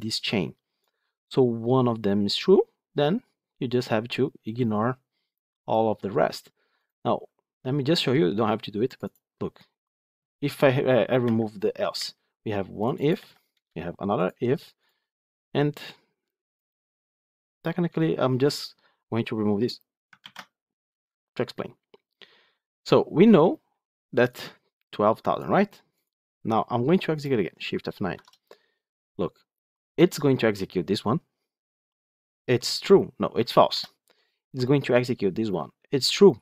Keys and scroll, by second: 11.1 Delete, 20.1 ctrl+x, 28.0 shift+F9, 33.6 F8.